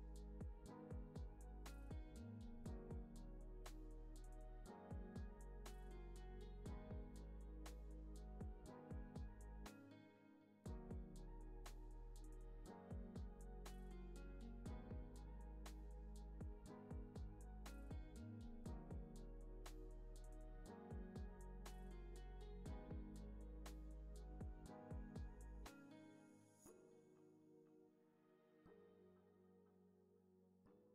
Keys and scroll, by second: 4.8 Delete, 9.6 super+a, 10.7 super+a, 16.1 u, 17.4 Delete, 18.5 super+s, 26.1 *.